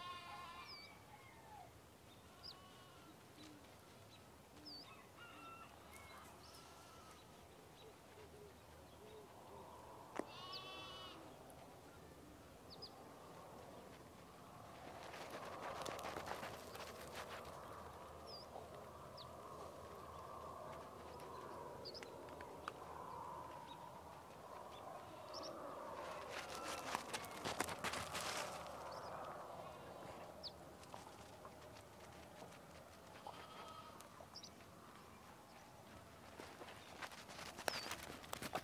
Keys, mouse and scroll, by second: 2.9-3.4 scroll up 1, 4.1 click, 5.3 Escape, 5.7 click, 6.2-7.3 scroll down 1, 8.9 click, 9.6 alt+scroll down 1, 9.9-11.1 alt+scroll up 2, 11.1 click, 11.5-12.4 scroll up 1, 12.4 click, 13.5-14.0 scroll up 1, 14.0 right click, 14.6 click, 16.3 ctrl+z, 16.8-20.1 alt+drag, 22.1 alt+scroll down 1, 22.5 alt+scroll up 1, 22.8-23.3 scroll down 1, 24.5-25.4 scroll up 2, 24.8 click, 25.4-26.9 drag, 27.1-27.8 scroll down 1, 27.8 click, 28.4 scroll down 1, 29.2-29.9 alt+scroll up 1, 29.9 click, 31.0-33.3 scroll down 5, 33.3 click, 36.3-36.8 scroll up 1, 36.8 click, 37.0 alt+scroll up 1, 37.2 click, 38.5 alt+click.